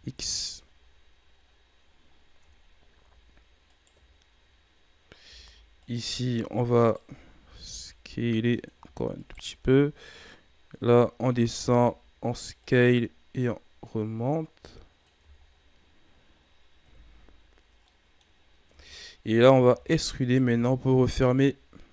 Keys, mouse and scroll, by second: 0.1-1.2 scroll down 6, 0.5 a, 1.3-2.3 scroll up 6, 2.3 Tab, 3.7 alt+right click, 5.7 alt+right click, 6.8 alt+right click, 7.5 s, 9.1 alt+right click, 10.2-11.5 drag, 11.5 s, 13.3-15.1 drag, 15.1 Tab, 15.4-16.8 scroll down 6, 16.8 KP_3, 17.8-18.2 middle drag, 18.2 scroll up 4, 18.6 Tab, 19.6 e, 20.5 s.